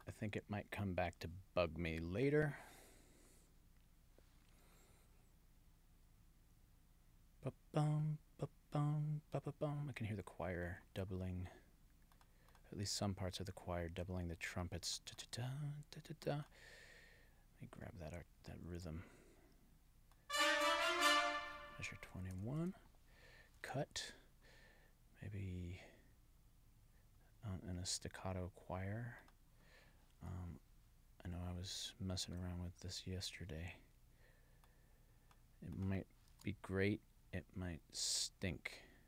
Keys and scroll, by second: 23.6 super+c, 36.3 super+v.